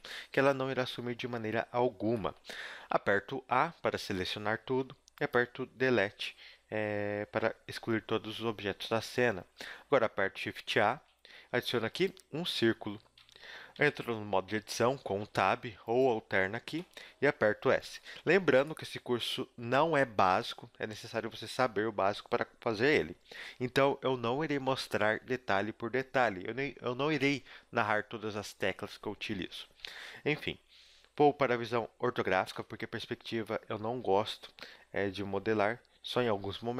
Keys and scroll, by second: 0.4 Tab, 2.8 a, 3.0 a, 4.2 Delete, 10.0 shift+a, 12.4 s, 13.8 Tab, 16.7 s, 32.5 KP_5.